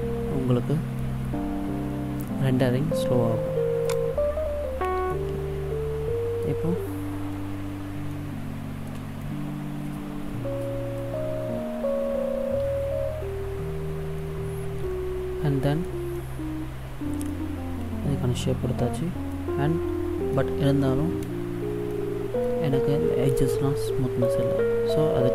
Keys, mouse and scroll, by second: 3.8 click, 5.1 middle click, 8.1 shift+middle click, 14.2 middle click, 16.1 middle click, 19.3 middle click, 20.7-21.9 scroll up 1, 21.9 shift+middle click, 22.6-22.9 scroll up 2.